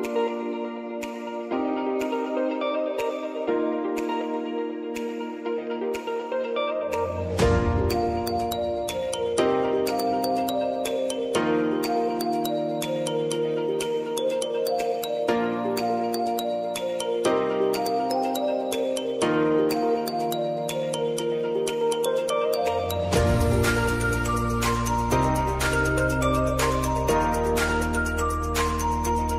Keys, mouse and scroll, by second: 4.6 ctrl+n, 6.5 shift+c, 8.7 click, 11.1 click, 13.9 Return, 16.6-23.3 drag, 21.9 Return, 23.3 Return, 23.5 click, 25.6 ctrl+k, 27.0-29.3 drag.